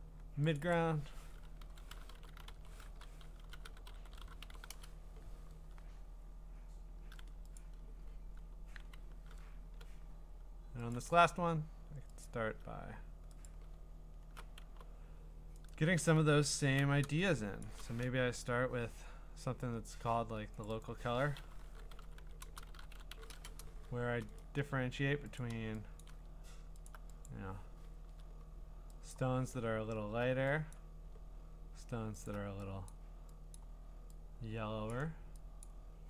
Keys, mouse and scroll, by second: 0.6 click, 0.7 click, 1.4-5.0 typing, 6.2-6.6 scroll, 6.5 typing, 7.6 click, 8.5 scroll, 9.7 b, 10.9 click, 12.3 alt+click, 13.5 click, 13.9-14.6 scroll, 15.7 right click, 16.2 Escape, 16.8 u, 17.6 Escape, 17.6 Escape, 17.6 click, 20.6 click, 20.8 click, 21.4-24.4 typing, 24.4 right click, 25.4 click, 26.0 click, 26.9 alt+click, 27.3 click, 27.9 ctrl+z, 28.1-28.4 ctrl+scroll, 29.1 click, 29.6-30.7 scroll, 30.7 click, 32.3 alt+click, 32.9 click, 33.6 click, 34.9 click, 35.6 click.